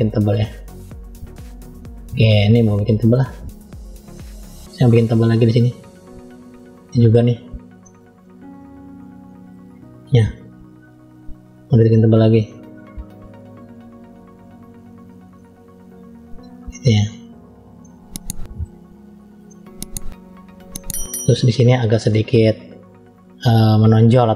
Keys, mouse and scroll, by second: 1.9-2.6 scroll down 1, 2.6 click, 4.0 middle click, 5.3 click, 7.0-7.6 scroll down 1, 7.6 middle click, 9.9 click, 13.8 click, 14.6 click, 15.8 click, 17.3-17.7 scroll down 2, 17.7 middle click, 18.8-19.3 scroll up 1, 19.3 middle click, 20.1 scroll up 1, 20.6 middle click, 21.6-22.3 scroll down 1, 22.5-23.2 scroll down 2.